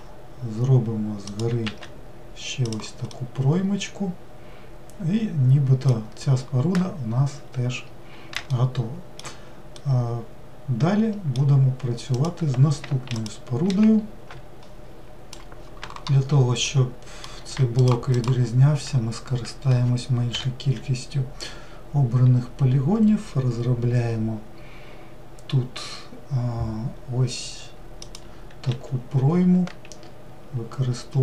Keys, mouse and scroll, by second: 3.2-6.2 middle drag, 6.2-8.1 scroll down 2, 8.1-8.5 scroll down 1, 8.5-12.2 shift+middle drag, 12.2-13.3 drag, 17.9 shift+click, 18.2 shift+click, 20.4 i.